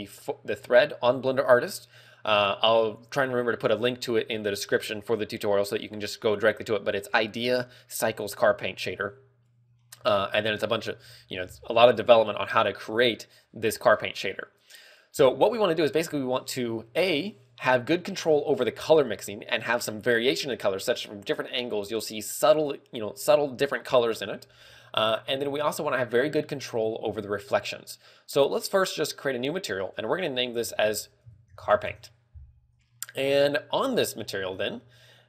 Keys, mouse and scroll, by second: 29.2 click, 30.2 click, 33.2-33.9 scroll up 6, 34.7 scroll up 1, 35.1 middle click.